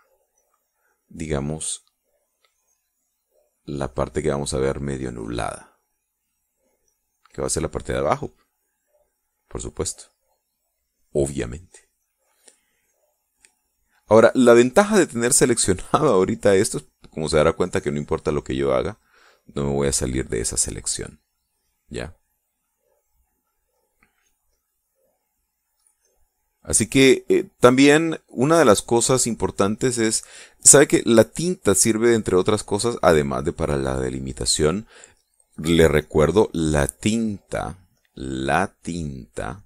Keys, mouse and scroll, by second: 1.0-8.0 drag, 8.8-10.2 drag, 10.3 click, 11.1 click, 12.1 click, 12.6 click, 13.2 click, 14.0 click, 14.7-16.0 drag, 16.1-17.2 drag, 17.4 click, 18.2 click, 20.0-21.4 drag, 21.7 click, 23.2-24.6 drag, 24.7-28.4 drag, 29.2 click, 32.3-34.2 drag, 36.6-38.5 drag, 38.6-39.6 drag.